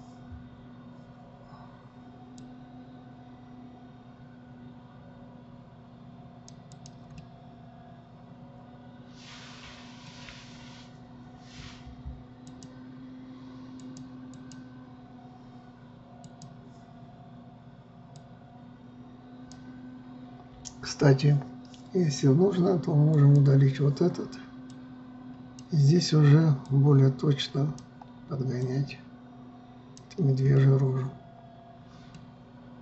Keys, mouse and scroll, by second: 3.0-6.1 drag, 7.3 click, 7.8-10.8 middle drag, 10.8 KP_1, 13.0-21.8 drag, 23.7 click, 25.4-31.1 drag, 31.1-32.8 middle drag.